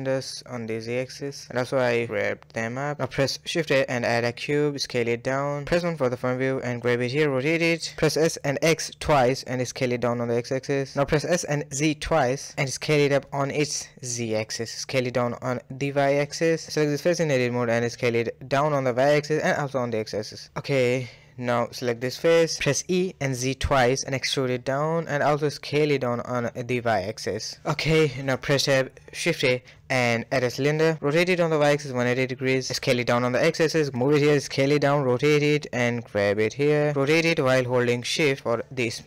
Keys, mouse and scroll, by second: 0.7-1.3 scroll down 7, 1.3-2.7 typing, 1.7-2.1 middle drag, 4.4 s, 5.4 KP_1, 5.7 g, 7.0 s, 8.4 shift+middle click, 8.5-9.1 scroll up 5, 9.1 shift+middle click, 9.7 s, 10.2 r, 11.2 s, 12.3 g, 12.4-12.9 scroll down 2, 12.9-13.8 middle drag, 13.8 s, 14.9 Tab, 15.1 middle click, 15.7 3, 16.0 click, 16.4 s, 17.9 s, 20.1 s, 21.0-22.2 middle drag, 22.2 click, 22.4-23.5 middle drag, 23.5 e, 25.4 s, 26.2-28.3 middle drag, 28.6 Tab, 29.0 shift+a, 31.5 r, 32.1 s, 32.8 KP_1, 33.0 g, 35.0-35.5 scroll up 6, 35.5 shift+middle click, 36.1 g, 36.6 r, 37.0-37.4 scroll down 1, 37.4-38.6 middle drag, 38.6 s.